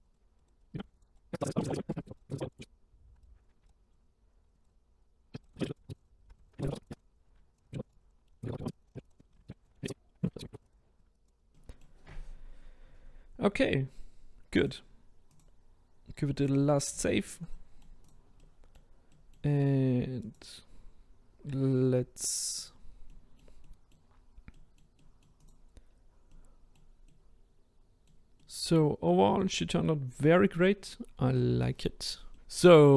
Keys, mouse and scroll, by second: 0.0 right click, 0.5 click, 0.6 middle click, 0.8 right click, 0.9 click, 1.1 ctrl+right click, 1.2 click, 1.3 middle click, 1.5-2.4 ctrl+right drag, 2.4 click, 3.1 right click, 3.3 click, 3.5 ctrl+z, 3.6 ctrl+z, 3.7 shift+right click, 3.8 click, 4.0 shift+right click, 4.0 click, 4.3 click, 4.5-4.8 right drag, 5.1 click, 5.3 middle click, 5.4 ctrl+right click, 5.7 click, 5.8 shift+right drag, 5.9 drag, 6.2 scroll down 1, 6.3 shift+right drag, 6.4 drag, 6.6 ctrl+right click, 6.8 click, 6.9 right click, 7.0 click, 7.2 right click, 7.3 click, 7.3 ctrl+z, 7.4 middle click, 7.5 click, 7.6 ctrl+right click, 7.8 click, 7.8 ctrl+right click, 8.1 middle click, 8.3 middle click, 8.4 ctrl+right click, 8.5 scroll up 1, 8.6 ctrl+right click, 8.7 click, 8.8-9.2 right drag, 9.2 middle click, 9.3 ctrl+right click, 9.4 click, 9.6 right click, 9.7 scroll down 2, 10.1 middle click, 10.4 shift+right click, 10.6 click, 10.8 right click, 10.8 middle click, 11.0 ctrl+right click, 11.1 click, 11.4-14.6 middle drag, 14.6-17.1 drag, 17.1-18.0 shift+middle drag, 18.0-18.4 drag, 18.4-20.2 middle drag, 20.2 click, 20.9-21.4 scroll down 1, 22.6 click, 23.1-24.1 middle drag, 24.1-24.6 scroll up 2, 24.6 middle click, 25.4 click, 25.9-26.3 scroll down 1, 26.3-32.9 middle drag.